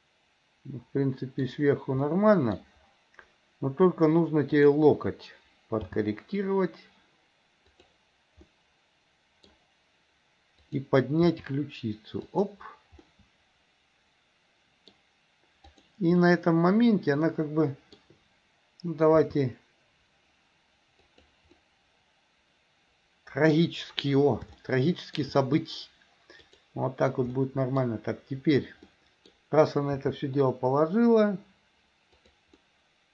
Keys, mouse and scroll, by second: 2.2 middle click, 4.7 click, 6.0 g, 8.6-9.7 middle drag, 10.6-11.0 drag, 11.4 r, 13.2-15.1 middle drag, 15.8 drag, 16.4-18.2 middle drag, 19.3 r, 21.7-23.8 middle drag, 24.7-25.4 shift+middle drag, 26.4 click, 27.6 middle click, 29.1-29.5 middle drag, 30.1 r, 32.8-33.1 middle drag, 32.8 scroll down 1.